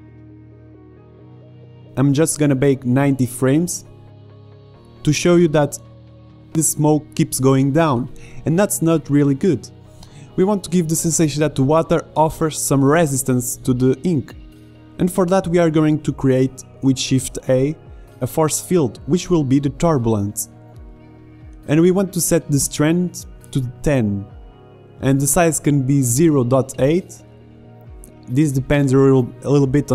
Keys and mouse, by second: 1.6 click, 2.0-4.0 drag, 4.0 KP_0, 5.5 alt+a, 8.0 alt+a, 8.3-9.5 drag, 11.9-13.2 middle drag, 13.2-15.2 drag, 16.0 shift+a, 22.7 middle click, 24.7 click, 26.8-27.9 drag, 29.1-29.9 drag.